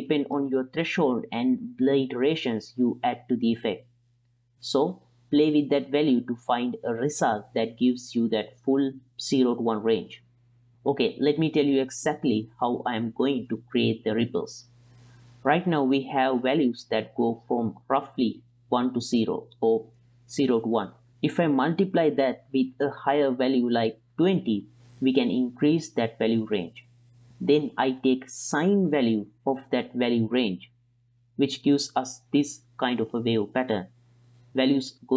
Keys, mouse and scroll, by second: 4.5 click, 5.9 middle click, 9.2 click, 10.7 t, 12.2 shift+space, 16.2 click, 17.0 click, 17.7 click, 20.5-21.0 middle drag, 22.0 click, 22.3 click, 23.7 click, 24.3 click, 25.0 middle click, 25.4 click, 26.0 click, 26.6 click, 27.0 click, 27.4 click, 27.6 click, 28.3 click, 28.9 click, 29.2 click, 29.4 click, 30.9-33.8 drag, 34.9 click.